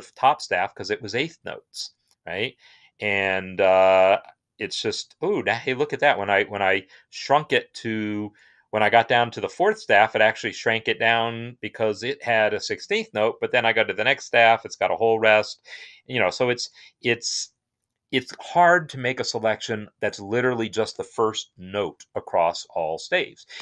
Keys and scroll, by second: 3.4 shift+Down, 3.9 shift+Down, 13.2 shift+Down, 16.1 shift+Down.